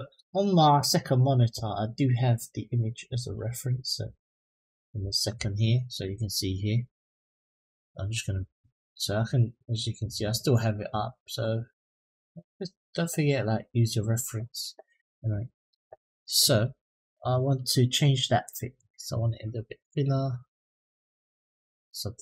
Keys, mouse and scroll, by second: 14.9 middle click, 18.5-22.1 drag.